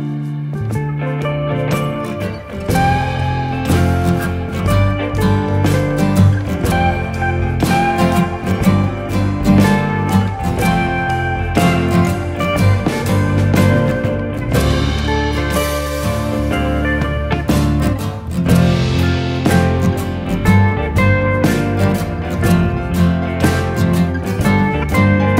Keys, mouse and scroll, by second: 1.6 click, 4.1 right click, 6.0 click, 12.8 alt+click, 18.9 click, 24.1 click.